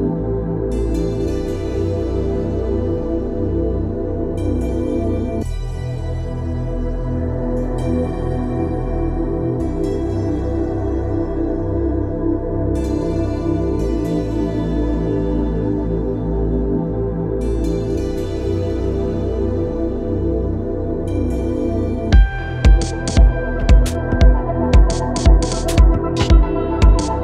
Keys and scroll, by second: 3.7 Escape.